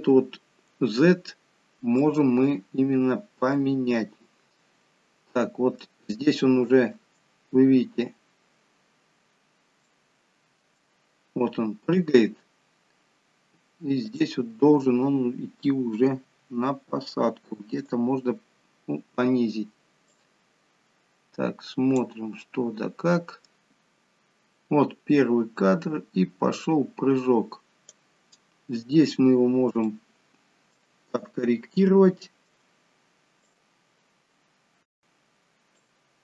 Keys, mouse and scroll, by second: 21.1 click, 21.1-21.6 scroll down 1, 22.5 middle click.